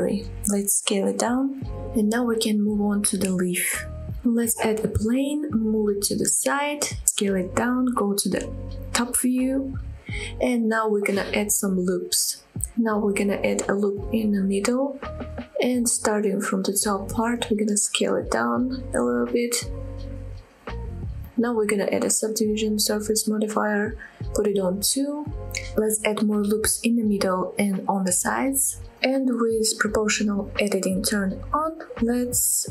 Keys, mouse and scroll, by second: 0.0 middle click, 0.5 s, 1.7 click, 1.9-2.2 scroll up 2, 2.4-2.8 shift+middle drag, 3.0-3.6 middle drag, 3.6 click, 3.6 scroll down 1, 3.8 middle click, 4.2 shift+middle drag, 4.6 shift+a, 5.6-6.0 middle drag, 6.1 g, 6.4 x, 7.5 click, 7.7 shift+middle click, 8.2 s, 8.9 click, 9.3 KP_7, 9.8 scroll up 2, 10.1 shift+middle click, 10.5 shift+middle click, 11.0 Tab, 11.2 scroll up 2, 11.6 shift+middle click, 12.2 shift+middle click, 12.6 scroll down 1, 13.1 ctrl+r, 14.7 ctrl+r, 15.5 right click, 16.2 click, 17.8 s, 19.3 click, 19.7 s, 20.4 click, 20.7 click, 21.1 s, 22.1 click, 22.7-23.9 drag, 24.8 click, 26.1 ctrl+r, 27.0 right click, 27.5 click, 27.7 click, 28.5-29.0 scroll down 2, 29.2 ctrl+r, 29.5 right click, 30.0 ctrl+r, 30.4 right click, 30.7-31.2 scroll up 2, 31.2 click, 31.5 s, 32.0-32.7 scroll up 4.